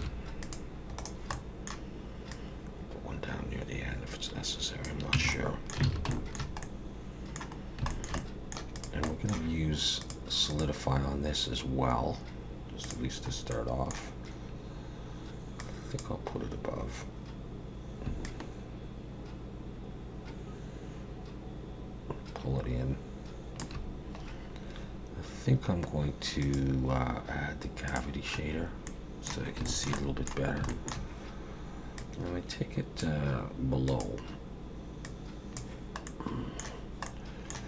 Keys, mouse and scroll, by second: 0.0 ctrl+r, 1.3 middle click, 2.3 click, 5.1 Tab, 5.3 middle click, 5.9 alt+a, 6.1 shift+middle click, 6.6 middle click, 7.6 scroll down 1, 7.9 shift+middle click, 8.2 middle click, 8.8 click, 9.1 middle click, 10.0 click, 10.5 click, 13.3 scroll up 1, 13.5 middle click, 15.6 click, 18.2 shift+click, 26.4 click, 28.4-28.9 scroll up 1, 28.9 middle click, 29.7 shift+middle click, 30.0 middle click, 30.7 shift+middle click, 32.0 click, 33.9 click, 35.0 click, 36.1 middle click, 37.1 middle click.